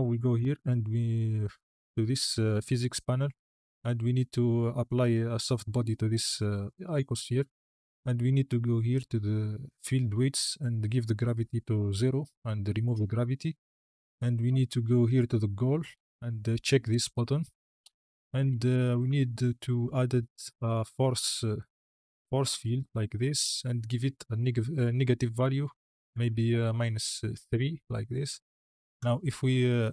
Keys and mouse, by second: 6.0-8.9 drag, 10.6 click, 15.9 click, 17.0 click, 18.4 shift+middle drag, 18.8 shift+a, 21.8 click, 24.0 click, 25.4-27.4 drag, 28.9 space.